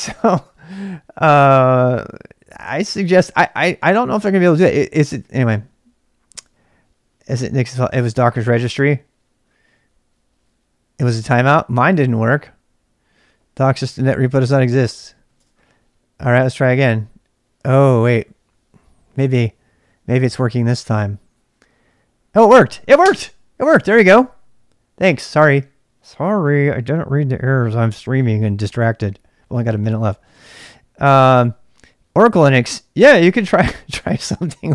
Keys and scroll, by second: 0.0-0.3 typing, 1.1 Return, 14.5 ctrl+[, 14.5 k, 14.8 k, 15.3 Return.